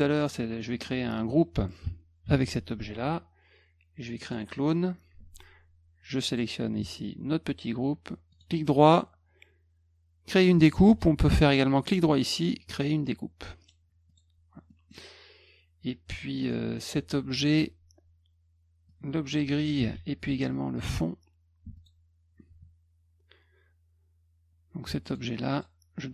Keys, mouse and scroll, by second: 0.2 click, 0.6 middle drag, 2.2 ctrl+g, 4.2 click, 6.3 shift+click, 8.3 right click, 10.8 Escape, 11.8 right click, 13.6 click, 14.1 click, 14.7 middle click, 16.4 click, 18.9-19.6 drag, 19.8 ctrl+z, 20.3 alt+click, 21.8 alt+click, 25.1 click, 25.5 click.